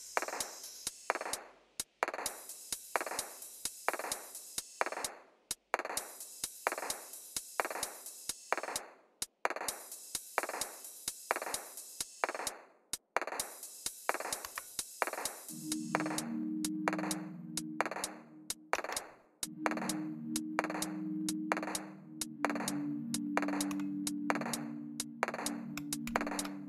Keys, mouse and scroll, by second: 0.6 typing, 2.6 scroll down 2, 3.2 scroll up 2, 4.8 right click, 6.0 click, 8.0 click, 10.1 right click, 11.6 click, 14.4 Right, 18.7 Down, 23.6 Home, 26.0-26.6 typing.